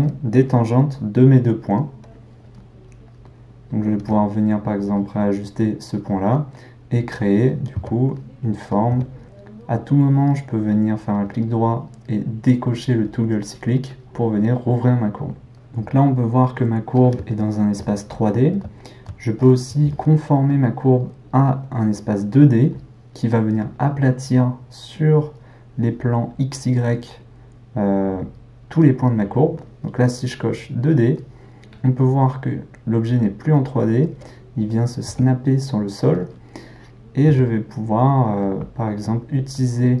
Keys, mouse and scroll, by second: 4.0 r, 6.6-7.8 middle drag, 7.8 s, 8.9 g, 11.2-15.5 right drag, 15.5-21.8 middle drag, 30.6 click, 33.1-35.1 middle drag, 35.1 g, 36.7 click, 37.3 g, 39.0-40.0 middle drag.